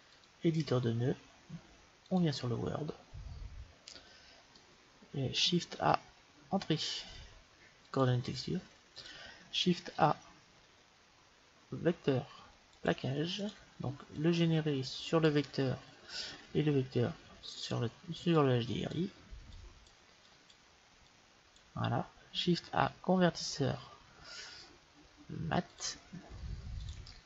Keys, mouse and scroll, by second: 0.2 click, 2.1-4.0 drag, 3.0 middle click, 4.0-5.9 middle drag, 5.9 shift+a, 10.0 shift+a, 14.2-15.9 drag, 16.3-18.2 drag, 18.4-23.0 drag, 22.7 shift+a.